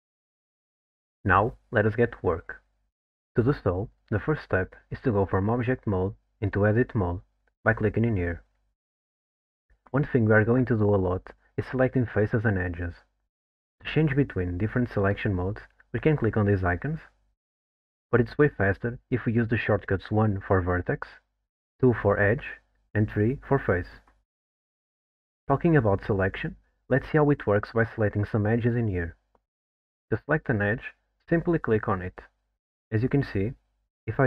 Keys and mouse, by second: 8.5-9.5 drag, 16.7 click, 17.3 click, 18.0 click, 20.3 1, 21.8 2, 23.2 3, 27.6 2, 29.8 middle drag, 30.4 alt+middle click.